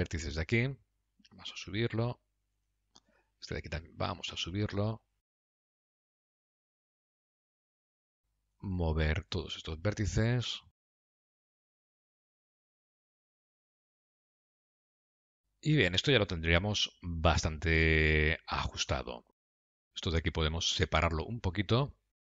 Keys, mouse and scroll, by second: 1.6 g, 3.5 click, 3.8 g, 5.6 middle click, 6.0 click, 6.3 shift+click, 6.5 g, 7.1 middle click, 7.3 Tab, 7.5 click, 7.6 middle click, 8.0 Tab, 8.2 click, 9.0 shift+click, 10.7 g, 11.2 g, 11.7 middle click, 11.9 g, 12.5 middle click, 12.6 Tab, 12.7 click, 12.8 Tab, 13.0 click, 13.3 g, 13.9 middle click, 14.1 g, 14.5 g, 14.9 middle click, 15.2 g, 17.9 scroll down 2, 18.8 middle click, 18.8-19.6 scroll down 1, 20.2 Tab, 20.8 click.